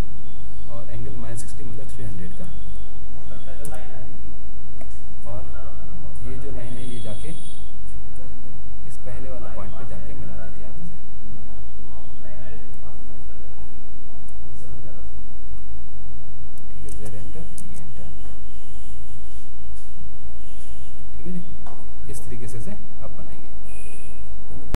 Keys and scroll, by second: 2.6 ctrl+š, 14.6 ctrl+?, 17.2 ctrl+z, 17.6 ctrl+y, 17.9 ctrl+z.